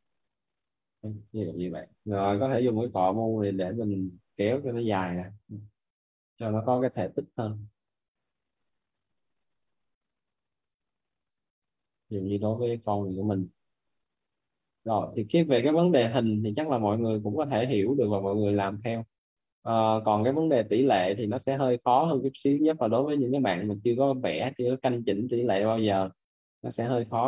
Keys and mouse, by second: 0.2 right click, 1.4 alt+right click, 1.8-3.3 typing, 3.2 alt+right click, 4.8 click, 9.3 right click, 9.7 click, 10.4 right click, 13.8 click, 16.7 right click, 19.1 click, 20.0 right click, 20.6 click, 23.7 right click, 25.4 click, 25.9 right click.